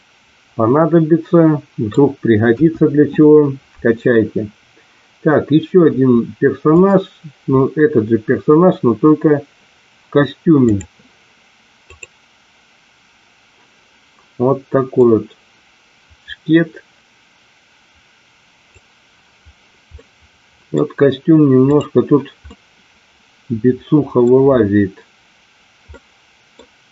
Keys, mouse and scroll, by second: 2.5 KP_1, 15.1-18.9 drag, 19.8 middle click, 21.7 click, 22.4-24.2 middle drag, 25.9 middle click.